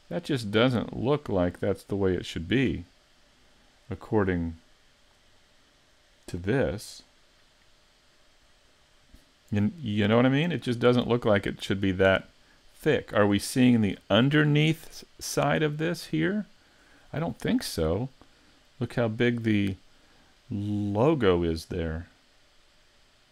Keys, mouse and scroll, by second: 5.4 middle click.